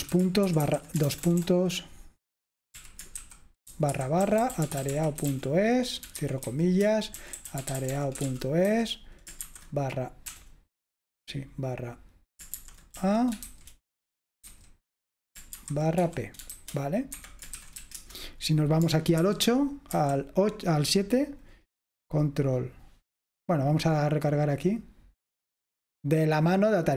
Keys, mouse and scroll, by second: 0.0-10.9 typing, 12.4-18.1 typing, 19.3 super+8, 20.1 super+7, 24.4 click.